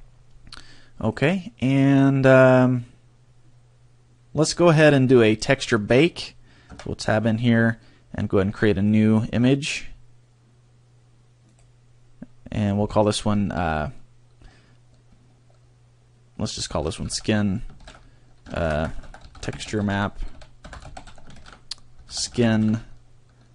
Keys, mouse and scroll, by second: 1.0 click, 6.9 Tab, 9.3 click.